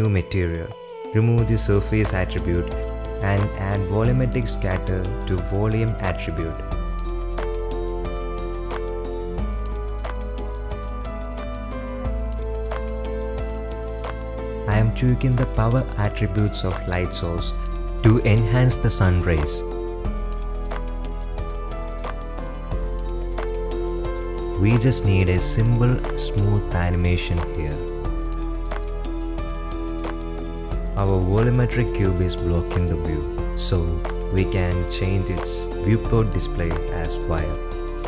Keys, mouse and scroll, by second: 0.9 click, 2.8 click, 3.4 click, 7.2-9.0 drag, 9.2-10.5 drag, 11.6 click, 11.8 middle click, 12.0 middle click, 12.5 click, 14.2 click, 14.6 click, 15.9-17.3 drag, 18.8-20.4 drag, 21.8 middle click, 22.9-25.8 drag, 27.4 r, 33.3 click, 34.2 click, 35.0 click, 35.2 click, 35.4 drag.